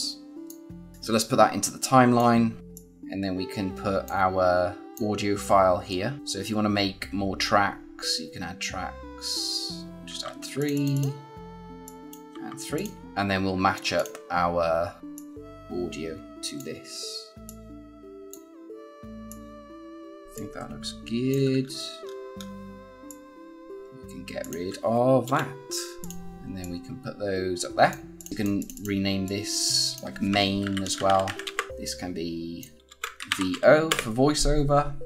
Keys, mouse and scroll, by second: 2.7 click, 6.2 right click, 10.0 3, 10.5 click, 12.2 3, 12.7 click, 13.0-13.9 alt+scroll up 2, 13.9 click, 15.1 click, 21.6-21.9 alt+scroll up 1, 22.6-23.0 scroll up 1, 23.0 click, 30.4-31.7 typing, 31.7 click, 32.8 Right, 32.8-33.7 typing, 33.8 Return.